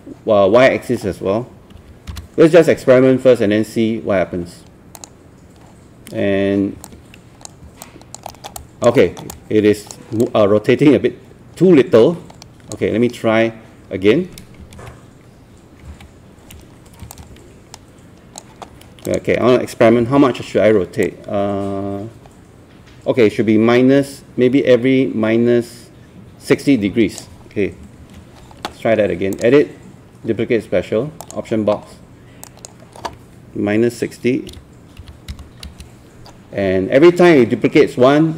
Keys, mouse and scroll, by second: 1.8 KP_4, 2.1 KP_0, 5.0 click, 7.8 alt+click, 8.3 alt+middle click, 8.6 alt+click, 9.0 alt+middle click, 9.3 alt+click, 10.2-12.8 alt+drag, 14.8 ctrl+z, 15.9 z, 17.1-18.5 drag, 21.0-27.5 drag, 28.0 ctrl+z, 29.4-33.5 drag, 35.0 KP_6, 35.3 KP_0.